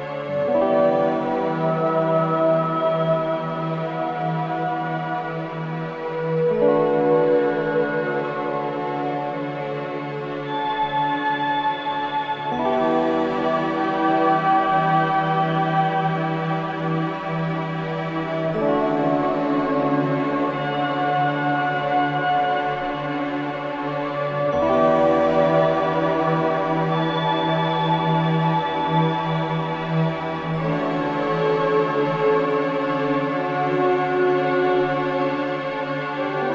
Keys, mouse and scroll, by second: 0.7 click, 2.2 click, 2.5-3.2 scroll up 1, 3.2 click, 4.4 click, 9.5 click, 10.0-11.5 middle drag, 13.8-16.8 drag, 18.2 click, 18.6-20.1 middle drag, 20.2 click, 21.8 click, 23.6 ctrl+z, 24.0 e, 26.3 click, 28.1-29.3 middle drag, 30.1 scroll up 1, 31.6 click, 33.6 click.